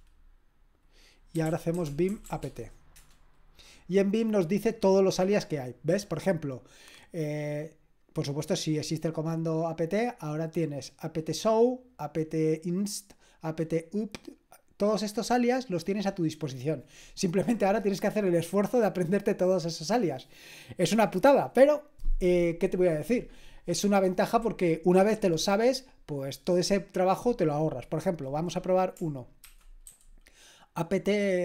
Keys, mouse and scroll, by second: 1.1-2.7 typing, 2.9 Return, 29.7-30.4 typing.